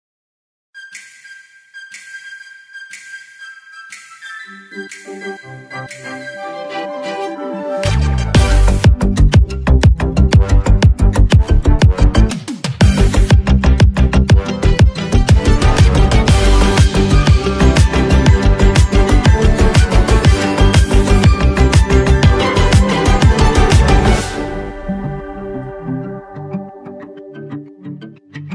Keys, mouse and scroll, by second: 2.5-2.9 alt+scroll down 1, 5.1 click, 15.4 ctrl+Num_Lock, 15.9 ctrl+click.